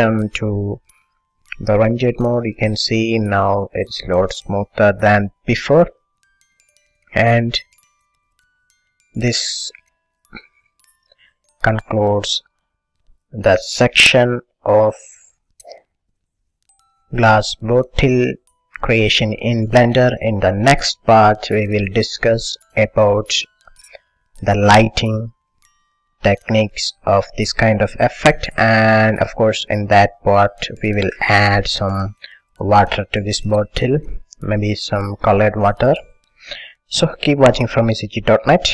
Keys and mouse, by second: 0.9-2.9 drag, 8.5-9.7 drag, 9.7-12.9 middle drag, 13.5 middle click, 15.0 click, 15.9 ctrl+s, 19.5-22.2 middle drag, 22.4-27.7 middle drag, 29.8 middle click, 31.4-34.8 middle drag, 35.2 middle click, 35.9 middle click.